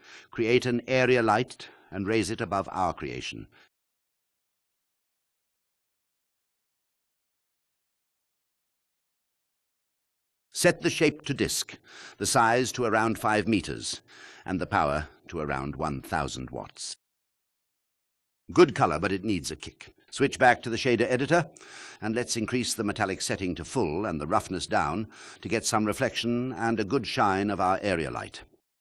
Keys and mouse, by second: 1.6 shift+a, 5.1 g, 5.6 z, 9.6 shift+drag, 11.2-12.1 drag, 12.5 click, 13.7 click, 14.9-17.0 drag, 15.8 KP_0, 22.6 alt+shift+click, 23.9-25.7 drag.